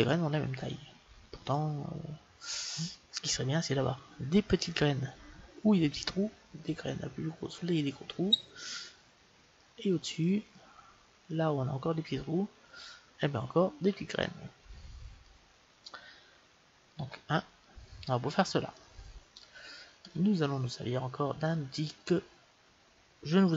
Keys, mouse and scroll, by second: 2.3-5.6 middle drag, 9.5-14.5 middle drag, 15.2-17.0 middle drag, 17.0 KP_1, 18.7-20.6 middle drag.